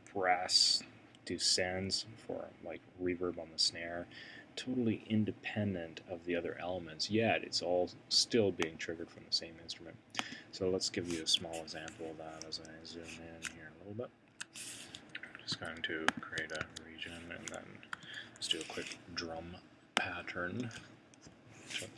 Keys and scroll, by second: 15.5 2, 16.7 1, 17.9 super+6.